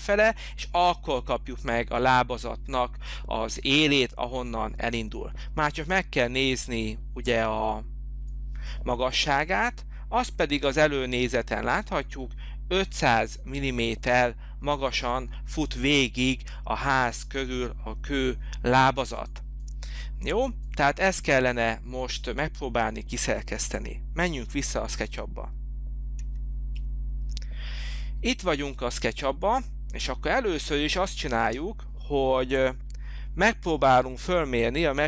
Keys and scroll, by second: 26.2 alt+Tab, 31.4 space, 31.9 space.